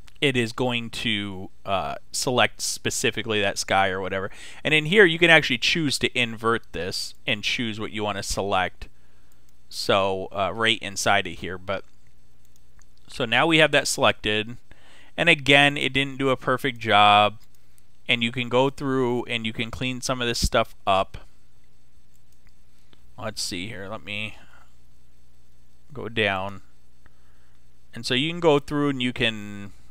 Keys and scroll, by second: 24.1 [.